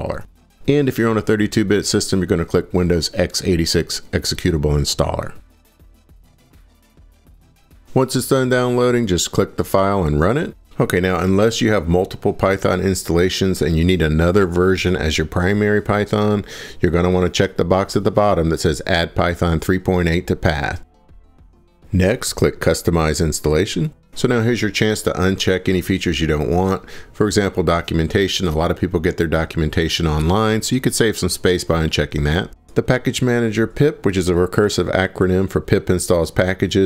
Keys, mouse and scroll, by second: 7.7 click, 9.0 click.